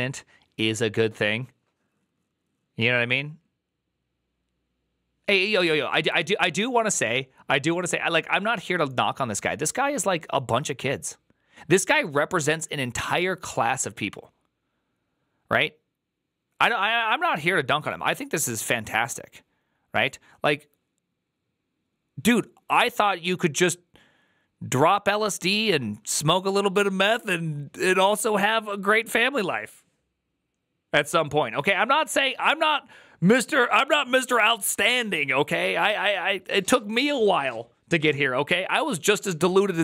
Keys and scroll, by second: 6.0 alt+[.